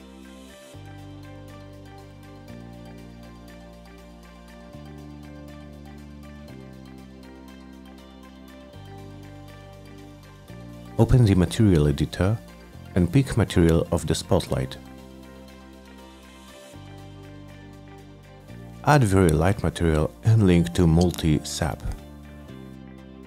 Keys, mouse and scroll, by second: 0.3 click, 0.6 click, 1.1 F9, 5.6 middle click, 9.4 click, 10.0 click, 10.5 click, 11.1 m, 12.7-13.5 drag, 14.0 click, 14.7 click, 15.4 click, 15.7 middle click, 15.9 middle click, 17.3 click, 17.7 middle click, 19.2 click, 19.6-21.8 typing, 22.3 click.